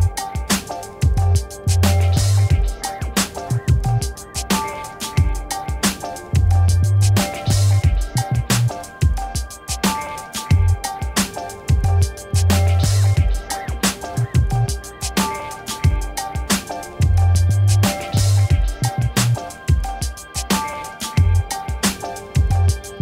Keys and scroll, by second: 1.3 Return, 3.9 x, 4.6 alt+BackSpace, 10.7 ctrl+i.